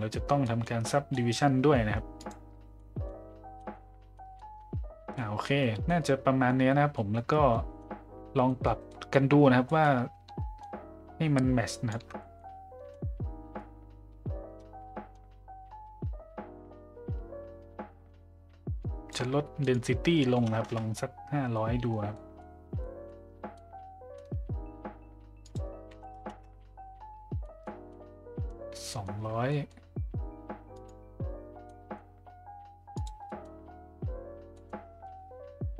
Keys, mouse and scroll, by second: 0.4 middle click, 0.9 middle drag, 2.2 click, 2.7 middle drag, 3.6 middle click, 4.1 middle drag, 5.1 middle drag, 5.8-6.5 middle drag, 6.9 middle drag, 7.5 middle drag, 8.5 middle click, 8.9 middle click, 9.7 middle click, 10.6-12.0 shift+drag, 12.2 middle click, 13.6-19.1 shift+drag, 19.7-21.2 drag, 20.5 KP_0, 21.5 middle click, 22.1 middle click, 22.8 middle drag, 23.5-24.1 middle drag, 25.5-26.8 drag, 26.2 KP_0, 27.4 middle drag, 27.9-28.5 middle drag, 28.9 middle drag, 29.5 middle click, 30.7 click, 31.6 middle drag, 32.9 click, 33.3 middle click, 34.5 middle click.